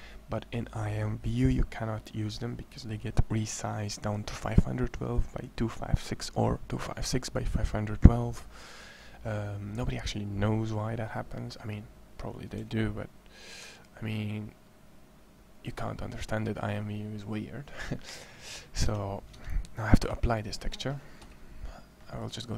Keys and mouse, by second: 0.2-1.3 middle drag, 12.4 a, 13.4 Tab, 18.7 Tab, 19.1 Tab, 19.8 z, 21.0 z, 22.0-22.5 drag.